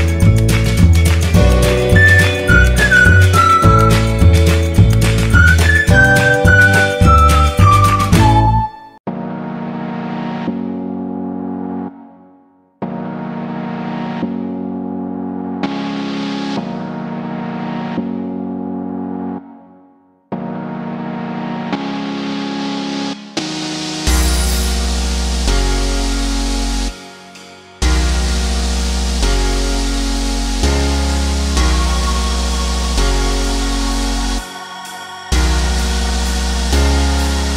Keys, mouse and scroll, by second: 4.7 r, 6.9 click, 11.4 e, 12.1-15.1 drag, 15.1 ctrl+d, 16.5 click, 22.3-26.3 drag, 26.3 ctrl+t, 27.6-35.0 alt+drag, 35.0 Right, 37.3 Return.